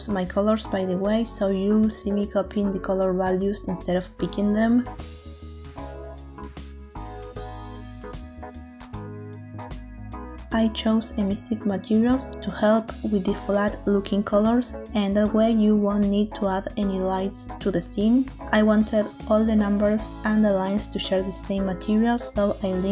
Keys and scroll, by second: 2.6 ctrl+v, 3.7 Return.